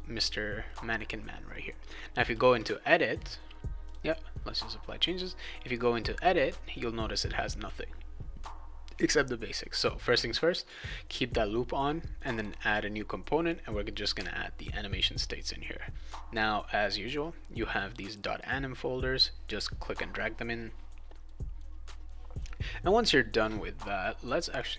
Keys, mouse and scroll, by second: 0.6 right click, 2.2 click, 3.8 click, 10.5 click, 10.7 click, 12.3 click, 13.4-14.6 drag, 21.1 click, 21.3 click, 21.7 click, 21.9 click, 24.5 click.